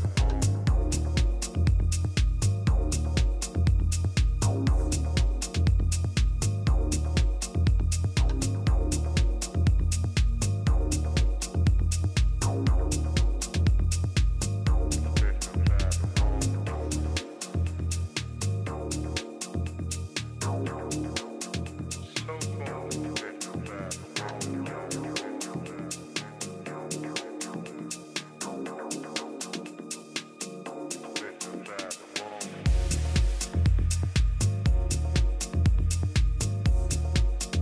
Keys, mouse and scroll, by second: 3.5-5.5 drag, 7.4-9.3 drag, 10.3 Tab, 11.0 a, 13.0 KP_3, 13.9 a, 14.5-15.7 middle drag, 16.7 a, 17.0 a, 21.3-24.4 drag, 22.6-24.4 right drag, 23.2-24.4 middle drag, 24.6-26.5 drag, 26.6 a, 27.9 b, 29.0 click, 30.5 b, 31.8 b, 32.8 a, 33.4 b, 35.6 g, 37.1 a.